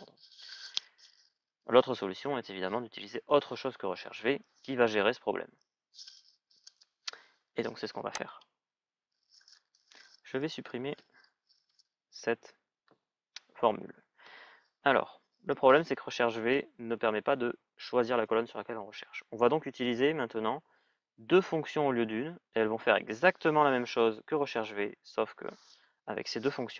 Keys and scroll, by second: 11.4 Delete.